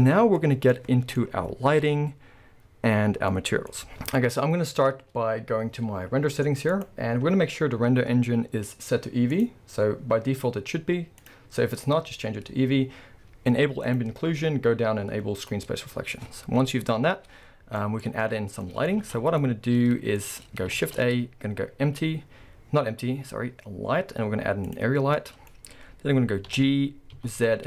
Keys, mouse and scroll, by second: 0.4-0.7 scroll up 1, 1.2-1.6 scroll up 1, 4.8 scroll down 2, 5.1-6.7 scroll up 2, 6.7 click, 9.3-14.0 drag, 12.3-13.9 scroll down 2, 15.4 click, 16.0-17.8 scroll down 1, 17.8-24.0 middle drag, 18.1 scroll down 1, 19.0 alt+a, 19.2 scroll down 1, 20.2 scroll up 1, 20.8 shift+a, 25.0 scroll, 25.2 middle click, 25.6-26.5 scroll, 26.5 g.